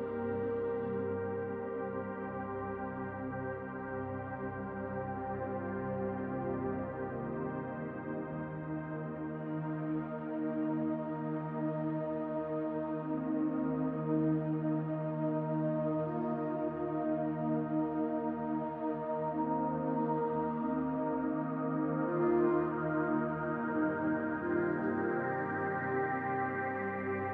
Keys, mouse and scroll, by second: 0.0-3.6 drag, 3.3 f, 3.8-6.3 drag, 6.0 scroll down 2, 6.3-11.7 middle drag, 6.7-8.1 scroll down 6, 8.4-9.1 scroll up 2, 9.1-9.9 scroll up 2, 9.9-11.7 scroll up 4, 11.7-17.0 drag, 16.6-17.0 scroll down 2, 17.0-18.4 middle drag, 17.3 scroll down 2, 17.8-18.4 scroll up 2, 18.4 click, 18.5-21.3 middle drag, 19.0 scroll up 2, 19.8-21.3 scroll up 2, 21.3 click, 21.5 click, 22.5-27.3 drag.